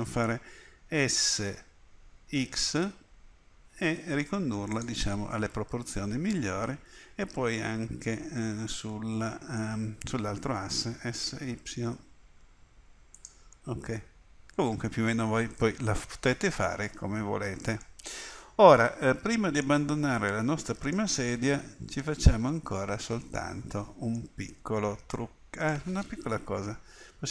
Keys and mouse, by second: 1.1 s, 5.2-6.5 middle drag, 7.2 middle click, 11.0 s, 13.6 click, 17.0 middle click, 20.4-22.2 middle drag, 24.4-26.4 middle drag, 26.9 KP_3.